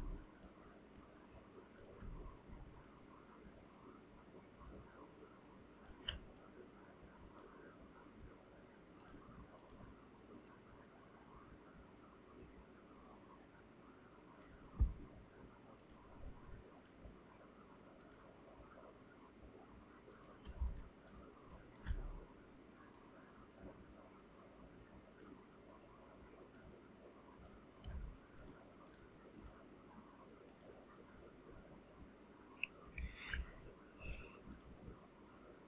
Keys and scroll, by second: 20.6 ctrl+space.